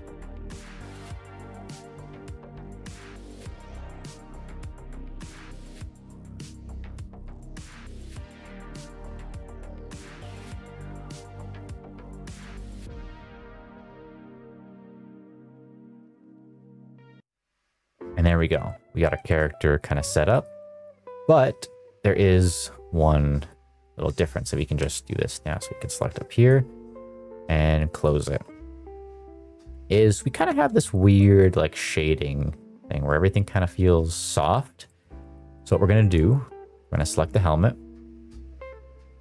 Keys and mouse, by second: 0.0 middle click, 0.1 click, 0.3 middle click, 0.4 click, 0.5 ctrl+c, 0.7 middle click, 0.9 ctrl+v, 1.2 click, 1.4 click, 1.6 middle click, 1.7 click, 1.8 ctrl+c, 1.9 middle click, 2.1 ctrl+v, 2.2 click, 2.4 middle click, 2.7 middle click, 2.9 shift+middle click, 2.9 middle click, 3.0 shift+middle click, 3.2 middle click, 3.3 middle click, 3.4 click, 3.6 middle click, 3.6 middle click, 3.7 ctrl+v, 4.0 ctrl+c, 4.3 ctrl+v, 4.4 click, 4.5 click, 4.8 shift+middle click, 4.9 middle click, 5.0 middle click, 5.1 ctrl+v, 5.2 ctrl+v, 5.2 middle click, 5.3 middle click, 5.6 middle click, 5.6 middle click, 5.7 ctrl+v, 5.8 ctrl+v, 5.8 middle click, 6.0 middle click, 6.1 click, 6.2 middle click, 6.2 click, 6.4 ctrl+z, 6.5 middle click, 6.6 click, 6.8 click, 6.9 middle click, 7.0 click, 7.1 click, 7.2 middle click, 7.4 click, 7.5 ctrl+c, 7.6 middle click, 7.7 middle click, 7.7 middle click, 7.8 middle click, 7.9 ctrl+v, 8.1 ctrl+v, 8.1 middle click, 8.2 middle click, 8.4 middle click, 8.5 click, 8.8 click, 8.9 ctrl+c, 9.1 click, 9.1 middle click, 9.3-9.8 ctrl+v, 9.9 0, 9.9 middle click, 10.1 click, 10.3 middle click, 10.4 click, 10.7 click, 11.0 ctrl+z, 11.1 ctrl+z, 11.1 click, 11.3 shift+middle click, 11.6 click, 11.8 middle click, 11.9 click, 12.1 middle click, 12.2 shift+middle click, 12.3 click, 12.4 middle click, 12.5 ctrl+c, 12.6 shift+middle click, 12.7 middle click, 12.8 middle click, 12.9 ctrl+v, 13.0 ctrl+v, 13.0 middle click, 13.1 click, 13.2 middle click, 13.4 ctrl+v, 13.5 click, 13.7 shift+middle click, 13.9 middle click, 14.0 middle click, 14.1 middle click, 14.2 middle click, 14.4-17.6 typing, 14.5 ctrl+c, 14.6 click, 14.7 ctrl+v, 15.0 ctrl+z, 15.1 ctrl+c, 15.2 click, 15.3 ctrl+v, 15.6 ctrl+c, 15.8 ctrl+v, 15.9 click, 16.2 ctrl+c, 16.3 ctrl+v, 16.5 click, 16.7 click, 16.8 ctrl+c, 16.9 click, 17.0 click, 17.5 ctrl+v, 18.6 shift+middle drag, 18.9 middle drag, 19.2 shift+middle drag, 20.2 middle click, 20.5 middle drag, 20.9 middle drag, 22.3 ctrl+s, 23.5-24.8 drag, 25.9 click, 26.9-28.0 drag, 28.7 middle drag, 29.4 middle click, 29.7 shift+middle click, 30.1 middle drag, 30.4-31.3 shift+middle drag, 34.5 middle drag, 34.8 shift+middle drag, 35.1 middle click, 35.5 middle click, 36.2 shift+middle drag.